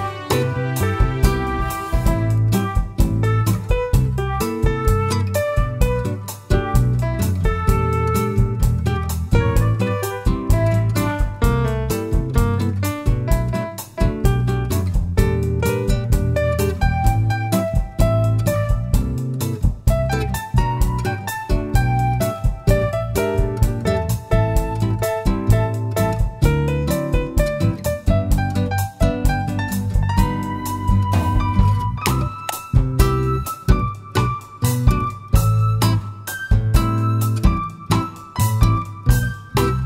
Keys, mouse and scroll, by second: 0.3 alt+click, 1.6 ctrl+b, 5.2 click, 5.9-7.3 middle drag, 7.3 alt+click, 7.9-9.2 middle drag, 9.2 ctrl+b, 11.1 click, 11.2-12.4 middle drag, 11.4-11.8 scroll down 1, 12.4 Tab, 12.7 scroll down 1, 13.2 middle click, 13.7 s, 15.4 click, 15.7 middle click, 16.1 s, 17.9 click, 18.2 scroll up 1, 18.7-22.5 middle drag, 22.5 click, 22.9 click, 24.8-28.7 drag, 28.7 right click, 30.1 click, 30.7-31.0 scroll up 2, 31.0-33.9 middle drag, 32.7-33.2 scroll down 2, 34.5 click, 35.3 g, 36.3 click, 36.6 `, 37.7-38.1 scroll up 1, 38.1 g, 39.3 click, 39.5 scroll down 1, 39.7 middle click.